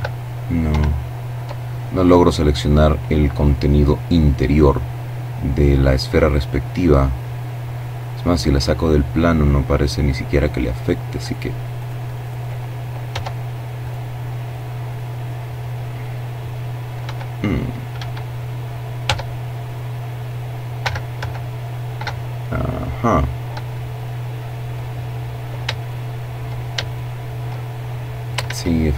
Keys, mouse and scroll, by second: 3.2-3.7 scroll down 1, 5.0-9.9 drag, 10.0 right click, 10.8 right click, 11.9 Tab, 12.6 right click, 15.8 l, 16.8 Escape, 17.8 Tab, 20.1 l, 21.1-21.6 scroll up 2, 24.6 shift+right click, 25.6 shift+right click, 27.2 ctrl+z, 28.5 z.